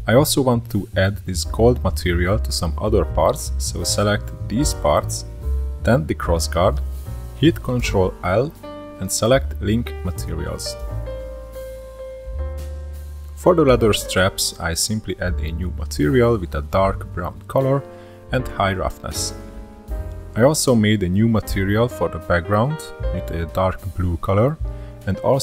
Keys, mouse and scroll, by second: 1.8 click, 3.6 shift+click, 4.2 shift+click, 5.9 shift+click, 8.8 ctrl+l, 11.4 click, 13.7-16.2 drag, 16.3-17.8 drag, 20.2-21.3 middle drag, 21.3-22.8 drag, 23.0 click, 23.7-25.4 drag.